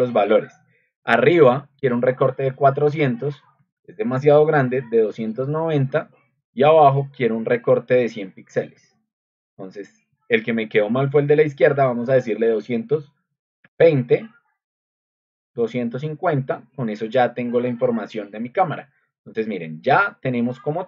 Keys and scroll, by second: 1.9-8.5 typing, 12.3 2, 12.4 2, 13.6 0, 14.8-16.5 typing.